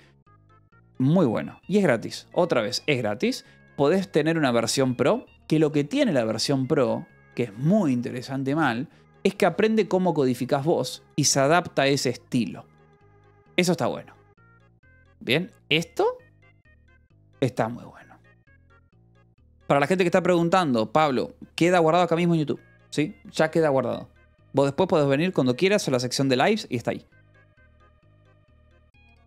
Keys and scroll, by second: 7.2 ctrl+=, 8.1 =.